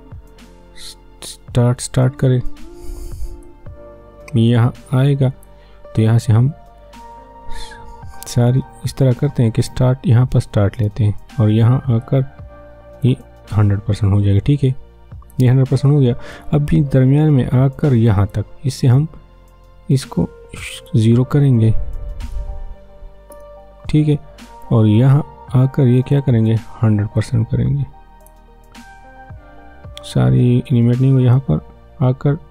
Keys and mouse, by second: 3.4-8.6 drag, 8.6 ctrl+z, 10.7-20.8 drag, 21.9 0, 23.3 Return, 25.0-31.3 drag, 31.3-32.5 drag.